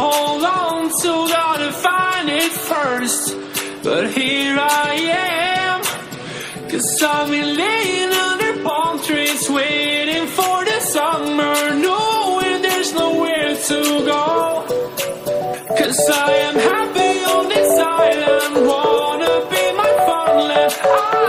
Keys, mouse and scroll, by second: 0.2 click, 1.7 drag, 2.8 click, 3.5 click, 4.1 click, 4.9 click, 5.3 drag, 7.6 click, 7.9-11.4 drag, 11.6 click, 12.2 drag, 12.7 drag, 13.7 click, 13.9-14.8 scroll down 4, 14.8 click, 17.7-18.1 scroll up 1, 18.1 KP_1, 18.5 scroll up 1, 18.7 click, 19.1-19.7 scroll down 3, 19.7 shift+d.